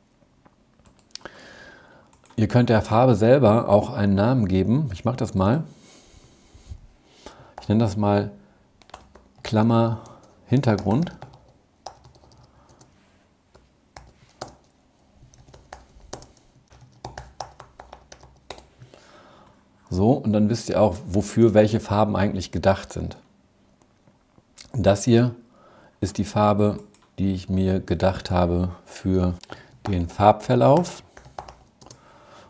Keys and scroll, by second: 12.9 alt+7.